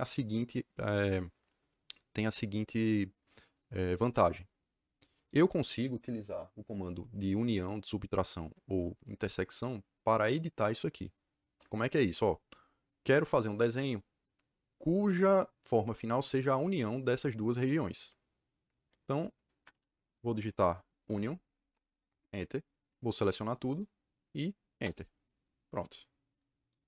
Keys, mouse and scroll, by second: 19.5 Escape, 20.1-22.0 typing, 23.1 click, 23.7 click, 24.6 KP_Enter.